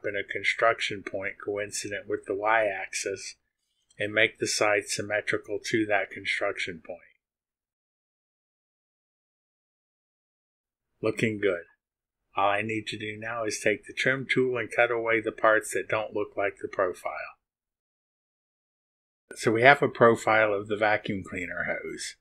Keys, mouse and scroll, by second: 0.5 click, 1.1 right click, 4.0 click, 5.2 click, 6.2 click, 9.9 click, 13.5 click, 16.5 click, 16.8 middle click, 17.7 click.